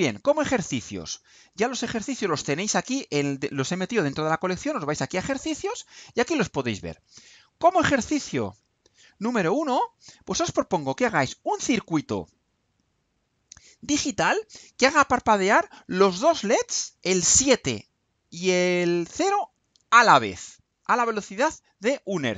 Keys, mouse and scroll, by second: 5.8 click, 7.7-9.7 drag, 10.6 click, 12.1 click, 12.5 click, 13.2 click, 18.3-20.1 drag.